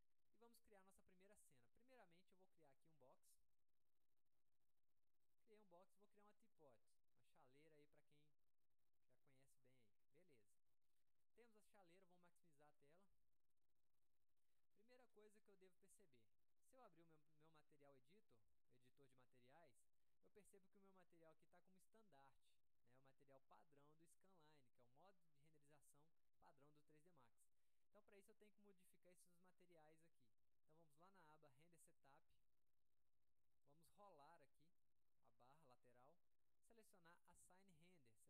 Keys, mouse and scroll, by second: 2.7 click, 3.5-4.7 ctrl+drag, 5.3 click, 6.4 click, 7.3-9.6 drag, 10.1-11.2 alt+middle drag, 12.7 click, 13.2 middle click, 13.9 alt+middle click, 18.4 click, 20.0 click, 24.4-25.7 drag, 32.0 click, 33.7-34.8 drag, 35.5 click.